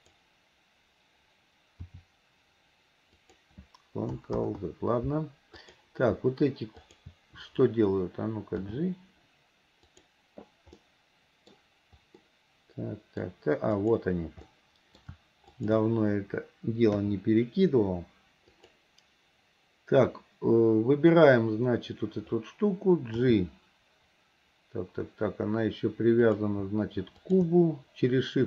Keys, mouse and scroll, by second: 0.0 click, 1.9 r, 4.5 ctrl+z, 5.6 click, 6.8 shift+click, 8.7 g, 10.9 middle click, 12.3-13.8 middle drag, 13.8 click, 14.6-15.1 middle drag, 15.6 shift+click, 17.0 KP_3, 18.6 click, 23.2 g, 27.2 shift+click.